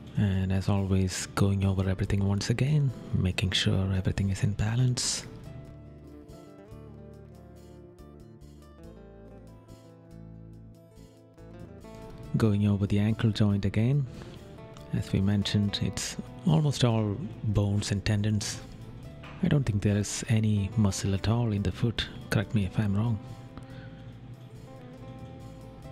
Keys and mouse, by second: 1.2 right click, 3.1 right click, 4.6 right click, 5.5 right click, 6.1 right click, 8.5 right click, 9.4 right click, 13.0 right click, 14.6 right click, 15.4 right click, 16.1 right click, 17.0 right click, 19.9 right click, 21.0 right click, 22.1 right click, 24.3 right click, 25.4 right click.